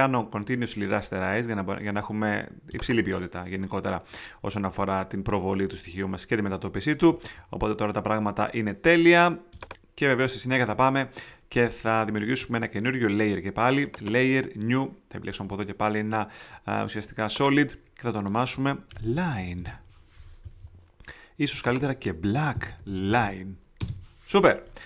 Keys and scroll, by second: 18.9-20.1 typing, 22.3-23.7 typing.